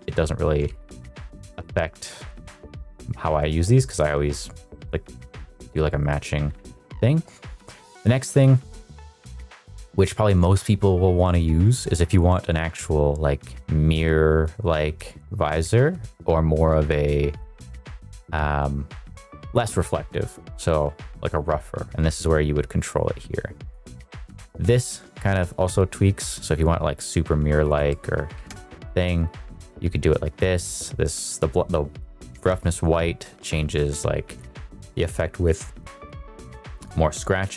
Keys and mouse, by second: 0.1 ctrl+z, 0.8 ctrl+z, 1.8 ctrl+z, 2.4 ctrl+z, 14.3-17.4 drag, 21.8-23.7 drag, 24.3-27.7 drag, 28.5 ctrl+z, 29.1-32.0 drag, 32.5-34.4 drag, 35.4 click.